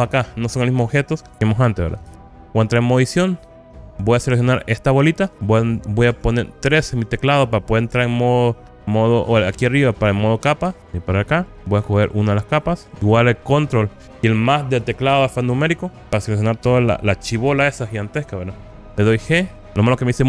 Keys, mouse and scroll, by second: 2.2 Tab, 3.7 scroll up 2, 4.7 click, 6.2 3, 8.2-8.9 scroll up 4, 10.9 shift+middle click, 12.3 click, 16.0 ctrl+KP_Add, 16.2 ctrl+KP_Add, 16.4 ctrl+KP_Add, 16.6 ctrl+KP_Add, 16.8 ctrl+KP_Add, 17.0 ctrl+KP_Add, 17.2 ctrl+KP_Add, 17.4 ctrl+KP_Add, 17.7 ctrl+KP_Add, 18.4 KP_Add, 18.5 KP_Add, 19.2 g, 19.6 scroll down 2.